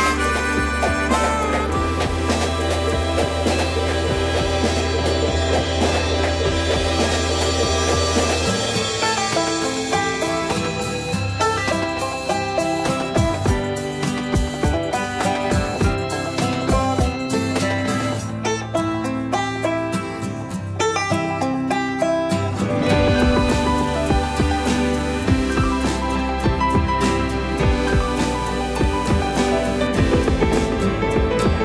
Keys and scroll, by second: 0.6 q, 2.4 shift+c, 4.2 typing, 4.5 Return, 6.5 space, 7.8 m, 15.3 shift+c, 22.7 shift+a, 23.9 space.